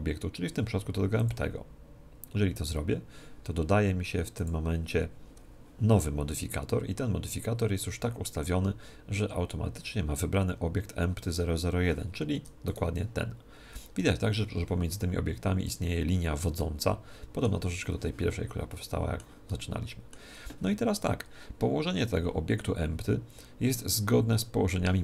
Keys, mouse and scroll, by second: 4.4 click, 12.4 Tab, 12.7 right click, 14.0 g, 16.6-21.2 middle drag.